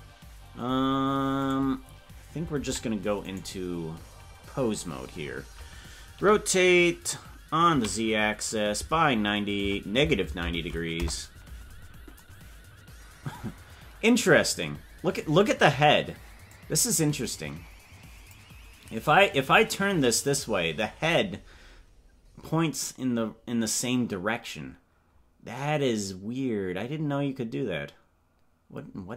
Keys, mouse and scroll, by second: 3.4-6.1 right drag, 6.1 r, 16.5-18.5 drag, 19.5 click.